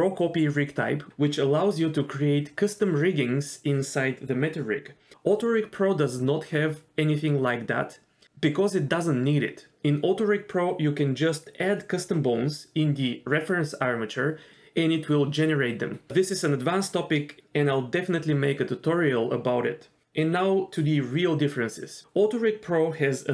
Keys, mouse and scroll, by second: 7.9 middle click, 14.2 KP_1, 17.6 d, 18.2 click, 18.2 d, 20.1 d, 20.4 click, 20.9 d, 21.0 d, 22.0 d.